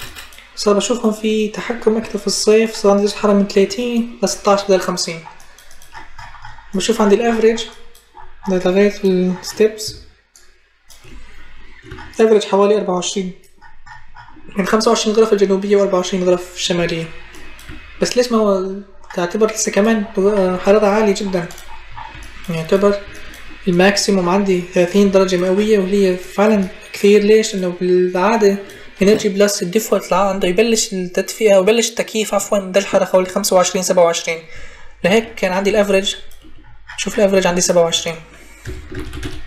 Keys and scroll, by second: 38.4-39.4 typing.